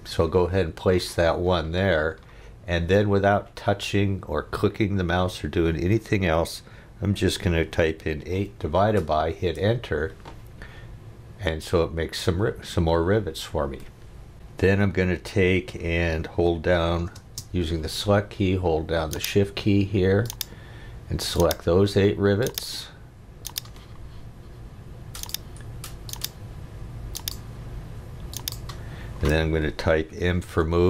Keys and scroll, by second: 7.9 8, 8.3 /, 9.4 Return, 17.1 space, 30.2 m.